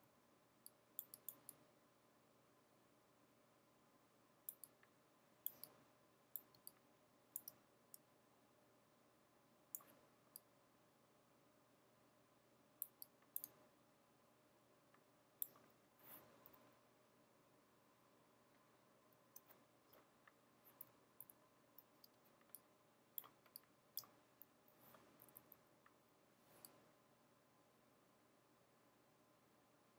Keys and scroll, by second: 0.0-0.5 typing, 6.6-7.5 typing, 10.2-10.7 typing, 16.6 super+-, 16.7 super+-, 17.1 super+-, 21.3 super+=, 22.2-23.8 typing, 25.2-26.1 typing.